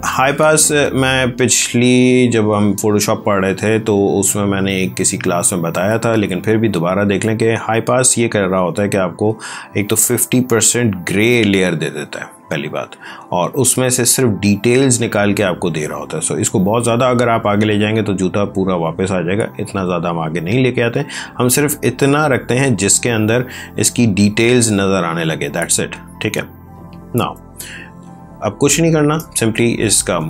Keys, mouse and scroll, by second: 0.7 space, 1.3 ctrl+click, 18.5 click, 21.4 click, 23.9 click, 26.8 click, 27.7 ctrl+space, 30.2 click.